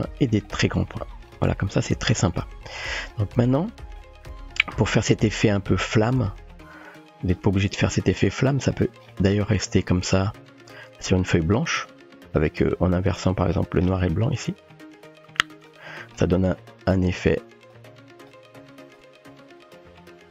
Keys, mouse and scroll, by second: 2.5-2.8 shift+middle drag, 3.6-4.0 middle drag, 5.4 middle click, 6.1-6.5 drag, 6.9-7.3 drag, 7.3-8.2 typing, 7.7 click, 9.8 click, 10.6 scroll down 1, 14.8-15.7 drag, 17.9 click, 19.0 click.